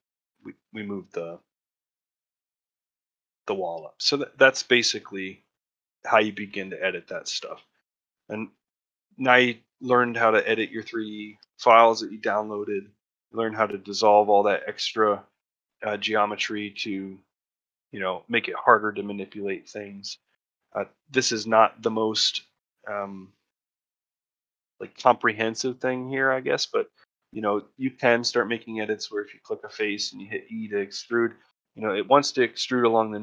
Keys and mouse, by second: 0.3 ctrl+middle click, 0.6 ctrl+middle click, 1.0 ctrl+middle click, 1.8 middle click, 2.3 shift+middle click, 2.6 middle click, 3.2 shift+middle click, 3.8 shift+middle click, 4.2-5.4 middle drag, 5.9 middle click, 6.7 Tab, 7.0 middle drag, 7.4 shift+middle click, 7.6-8.4 middle drag, 8.6 shift+middle drag, 8.9-9.5 middle drag, 9.7-10.4 middle drag, 10.6 middle drag, 11.1 ctrl+middle click, 11.3 shift+middle drag, 11.6 middle drag, 12.0-12.8 middle drag, 13.0 middle drag, 15.1 middle click, 16.0 middle click, 16.3 middle click, 16.6 middle click, 17.7 middle click, 18.2 middle click, 19.2 middle click, 20.0-22.0 middle drag, 22.6 middle click, 23.6 middle click, 24.1 shift+middle click, 24.5 middle click, 24.9 shift+middle click, 25.7 middle click, 27.2 3, 27.7 click, 28.0 middle click.